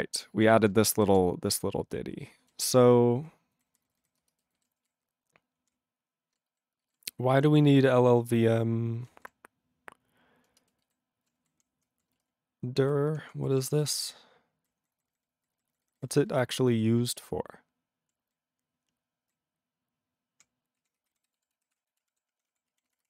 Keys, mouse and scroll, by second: 0.3 ctrl+e, 0.9 ctrl+alt+b, 2.4 ctrl+g, 2.5-3.3 ctrl+n, 3.5 ctrl+n, 3.7 ctrl+n, 3.8 ctrl+n, 4.0 ctrl+n, 4.2 ctrl+space, 4.6 ctrl+alt+b, 4.8 ctrl+g, 5.6 ctrl+p, 6.4 ctrl+p, 6.6 alt+b, 6.8 alt+b, 7.4 ctrl+n, 7.5 ctrl+n, 7.6 ctrl+n, 7.8 ctrl+n, 7.9 ctrl+n, 8.1 ctrl+n, 8.1 ctrl+e, 9.0 ctrl+n, 9.0 ctrl+e, 9.1 ctrl+n, 9.2 ctrl+e, 10.5 ctrl+space, 10.9 ctrl+alt+b, 11.4 ctrl+g, 11.5 ctrl+p, 11.7 ctrl+p, 12.1 ctrl+space, 12.1 ctrl+e, 12.8 ctrl+g, 13.0 ctrl+p, 13.2 ctrl+p, 13.5 ctrl+p, 13.7 ctrl+p, 13.9-14.7 ctrl+n, 14.8 ctrl+n, 15.1 ctrl+n, 15.2 ctrl+n, 15.5 ctrl+n, 15.7 ctrl+n, 15.8 ctrl+n, 16.0 ctrl+n, 16.1 ctrl+n, 16.3 ctrl+n, 16.7 ctrl+n, 16.9-18.1 ctrl+p, 18.3-19.3 ctrl+n, 19.9-20.4 ctrl+p, 20.8 ctrl+s, 21.0 f.